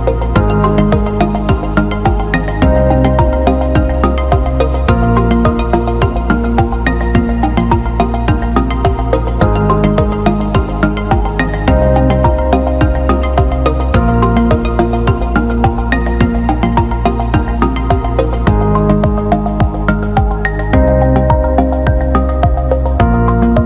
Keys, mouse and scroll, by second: 0.8-2.7 shift+drag, 4.9-6.9 shift+drag, 7.6 alt+middle click, 8.1 ctrl+alt+middle click, 8.3 ctrl+alt+click, 9.3-9.7 alt+middle drag, 10.1-11.5 alt+middle drag, 12.5-19.6 shift+drag, 20.3 alt+middle click, 21.2 alt+middle click, 22.0-23.5 drag.